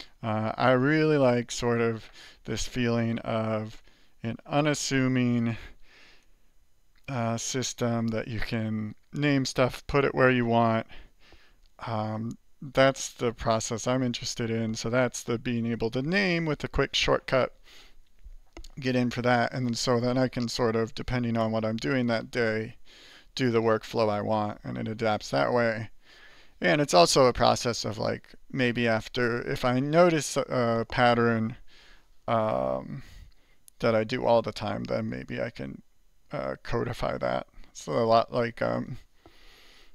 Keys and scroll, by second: 2.6 alt+Return, 5.1 alt++, 5.6 alt++, 13.4 ctrl++.